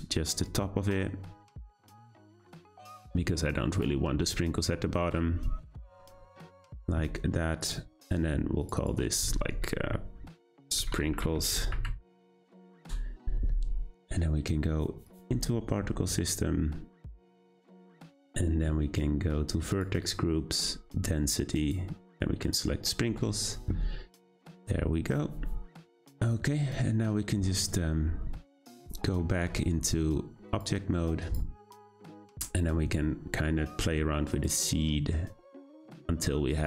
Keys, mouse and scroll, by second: 0.4 click, 2.7 click, 5.3 scroll down 1, 5.3 scroll up 1, 6.0-6.6 scroll up 1, 6.6 scroll down 1, 7.6 click, 8.6 click, 8.7-11.9 drag, 15.0 click, 16.4-19.7 scroll down 9, 19.7-20.1 drag, 20.1-21.6 scroll down 6, 21.6-24.3 drag, 29.0 q, 30.5-32.1 drag, 32.1-32.8 scroll up 1, 34.3-36.6 drag.